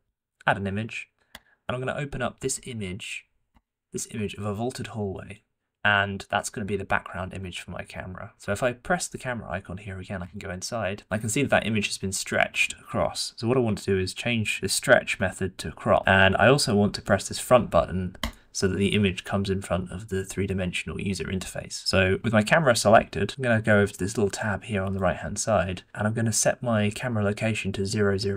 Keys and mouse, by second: 0.0 click, 10.2 click, 18.2 click, 24.9-28.3 drag.